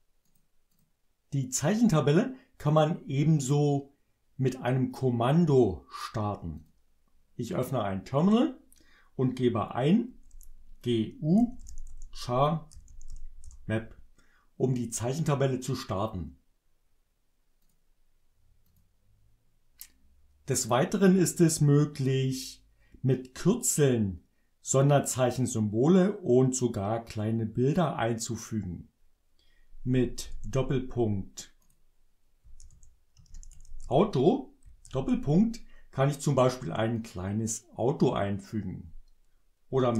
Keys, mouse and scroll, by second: 0.2 click, 0.7 click, 6.6 click, 9.8-13.6 typing, 17.6 click, 18.7 click, 30.2 shift+., 31.6 click, 32.6-34.8 typing, 36.8 click, 39.9 shift+..